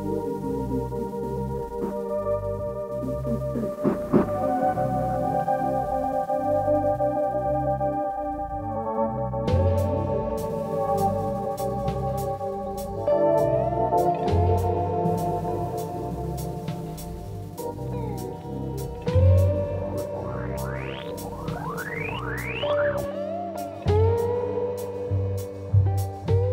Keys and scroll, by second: 1.9 shift+l, 2.1 shift+e, 2.2 shift+g, 2.3 Return, 3.3 shift+f, 3.4 shift+o, 3.7 shift+t, 3.8 Return, 8.0 Escape, 11.0-13.2 typing, 11.4 Return, 14.4 F1, 18.6 ctrl+d, 18.7 Escape, 20.8 ,, 21.8 ..